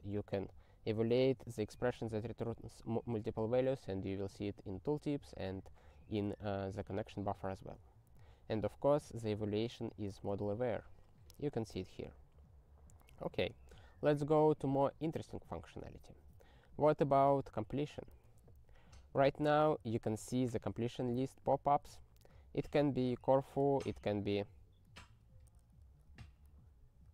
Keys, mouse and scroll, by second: 4.2 ctrl+n, 7.6 ctrl+e, 10.1 ctrl+e, 13.8 ctrl+n, 14.0 ctrl+n, 14.8 ctrl+n, 17.6 ctrl+b, 18.5 ctrl+alt+i, 20.9 ctrl+v, 23.1 ctrl+g, 23.3 alt+x.